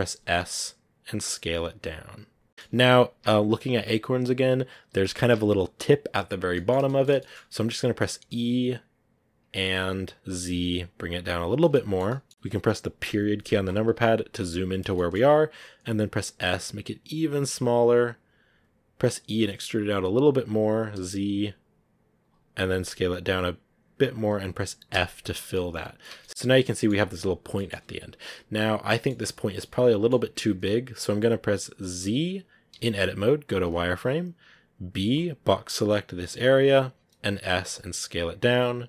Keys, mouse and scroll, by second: 0.0 s, 2.5-6.3 middle drag, 6.3 scroll up 1, 6.4-8.1 middle drag, 8.1 e, 11.6-12.9 shift+middle drag, 12.9 KP_Decimal, 14.4-14.8 scroll down 2, 14.8 shift+middle click, 15.7 s, 19.1 e, 22.5 s, 24.8 f, 25.2 scroll down 5, 25.4 middle click, 25.9 Tab, 26.1 middle click, 26.3-26.6 scroll up 5, 26.6-27.8 middle drag, 27.8-28.2 scroll down 3, 28.2-30.0 middle drag, 30.0-30.6 scroll up 4, 33.6 z, 36.4 b, 37.3 s.